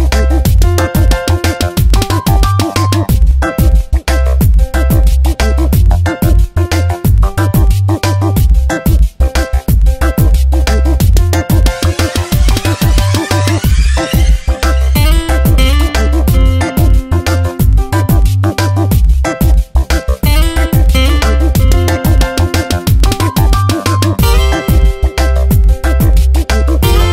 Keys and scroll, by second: 3.4 space, 12.9 t, 17.7 shift+f, 18.9 BackSpace, 20.1 shift+s, 20.7 ctrl+Return, 23.4 shift+a, 24.5 ctrl+Return, 25.1 v, 25.5 ctrl+t.